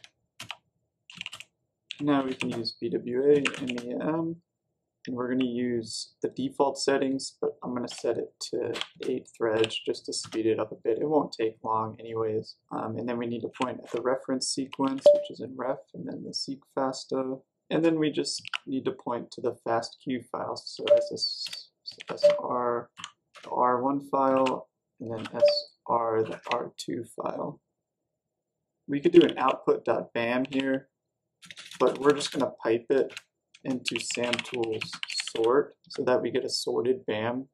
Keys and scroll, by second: 0.0-4.8 typing, 0.3 Return, 8.4-10.7 typing, 13.2-15.1 typing, 17.6-19.1 typing, 20.7-26.7 typing, 20.8 Tab, 25.3 Tab, 28.5-36.3 typing.